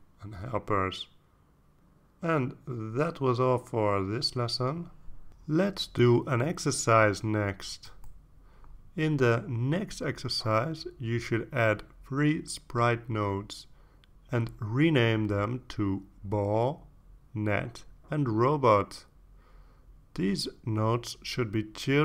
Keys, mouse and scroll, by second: 0.3 click, 1.1 click, 1.7 click, 2.3 click, 2.6 click, 3.4 click, 4.1 click.